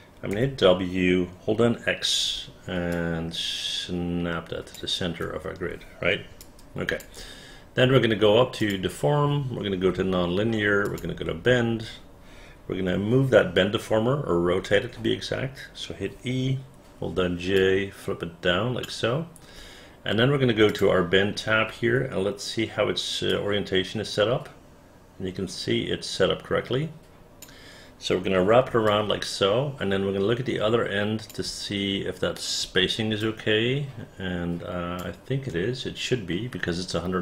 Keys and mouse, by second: 3.1-4.9 drag, 3.1 x, 6.5 alt+click, 11.0 click, 14.8 e, 17.3 j, 17.7-19.0 drag, 23.4-27.5 drag, 29.0-31.4 alt+drag, 33.3-35.1 alt+drag.